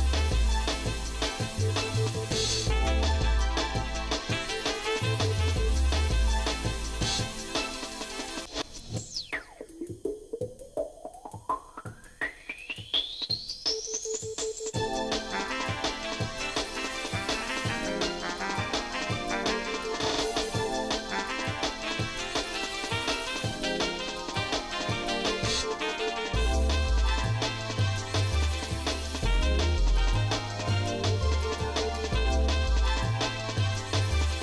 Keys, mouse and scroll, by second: 0.9 shift+middle click, 1.7 middle click, 2.3 shift+middle click, 3.3 shift+middle click, 4.0 z, 5.5 middle click, 6.0 shift+middle click, 7.2 s, 9.8 shift+middle click, 11.7-13.4 drag, 14.7 s, 16.3 middle click, 17.0 shift+middle click, 17.6-18.2 scroll down 4, 18.4 scroll up 1, 18.6-19.0 scroll down 1, 19.4 middle click, 20.4 ctrl+shift+right click, 21.4 z, 23.0 ctrl+shift+right click, 24.1 z, 26.4 middle click, 26.9-27.2 scroll up 2, 27.3 shift+middle click, 27.9 middle click, 28.5 shift+middle click, 29.0 middle click, 29.5 scroll up 1, 30.0 middle click, 30.5 shift+middle click, 31.6 s.